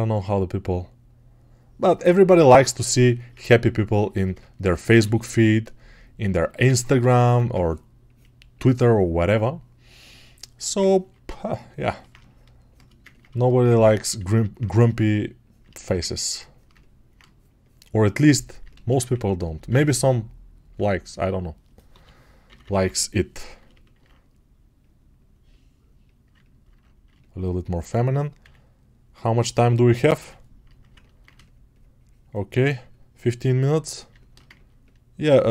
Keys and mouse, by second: 7.4 1, 12.0-14.5 shift+drag, 14.5-18.7 shift+right drag, 30.3 ctrl+r, 34.0-35.5 alt+shift+drag.